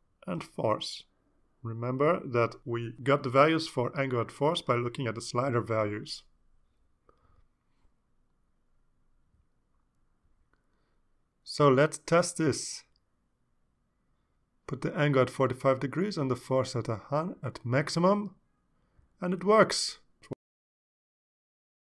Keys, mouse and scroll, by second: 0.2 scroll up 2, 1.3 click, 3.1 ctrl+c, 4.5 click, 5.4 ctrl+v, 6.3 click, 8.0 ctrl+s, 12.6 click, 16.7-17.8 drag, 18.0-18.7 drag, 19.5 click.